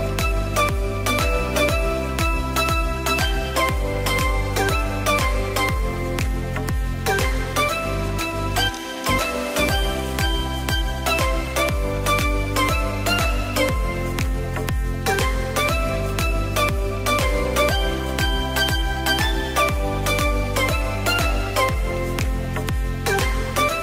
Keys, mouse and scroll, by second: 0.6 right click, 2.5 drag, 3.0 click, 3.5 click, 5.1 KP_3, 5.4 KP_7, 6.3 scroll up 1, 6.3 shift+middle click, 6.8-7.5 scroll up 1, 7.5 drag, 9.1-10.3 middle drag, 10.3 click, 11.7 click, 12.5 click, 14.0 shift+d, 15.6 click, 16.5-18.0 middle drag, 18.0-20.6 drag, 21.6-23.8 drag.